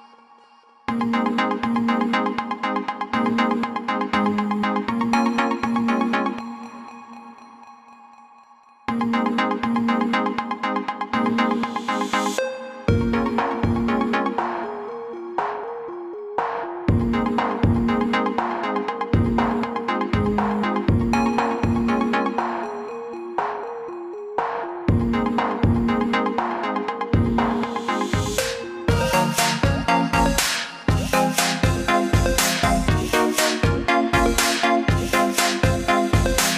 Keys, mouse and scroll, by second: 1.7 click, 3.5 ctrl+z, 5.8 click, 11.1 click, 14.1 click, 19.5 click, 21.0 click, 27.6 click, 31.4 click, 34.3 click.